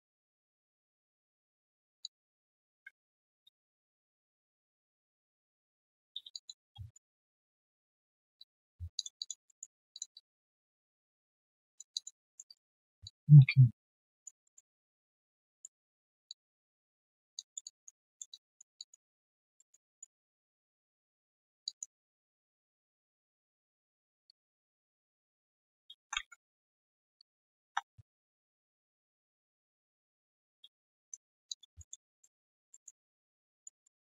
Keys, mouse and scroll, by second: 0.0 w, 2.0 alt+click, 2.7 ctrl+z, 4.1 ctrl+shift+click, 5.0 ctrl+shift+i, 6.3 alt+click, 6.6 alt+q, 6.7 right click, 7.7 alt+double click, 8.1 alt+right click, 8.3 alt+click, 8.7-9.2 scroll down 2, 9.2 alt+click, 9.4 alt+middle click, 10.1 alt+click, 11.4 alt+right click, 11.9 alt+click, 12.4 alt+right click, 13.0 alt+click, 14.4 alt+middle click, 14.7 alt+click, 15.9 1, 16.2 alt+click, 17.0-17.3 alt+scroll down 1, 17.3 alt+click, 18.0 alt+middle click, 18.3 alt+click, 19.1 alt+right click, 19.5 alt+middle click, 19.8 alt+right click, 20.5 right click, 21.6 alt+click, 22.8 right click, 24.4 double click, 25.0 ctrl+click, 25.7-28.1 typing, 29.2-30.5 typing, 30.9 right click, 31.2 scroll down 1, 31.4 alt+click, 31.8 alt+middle click, 32.0 alt+click, 32.4 alt+right click, 32.7 alt+middle click, 33.0 alt+click, 33.8 alt+middle click.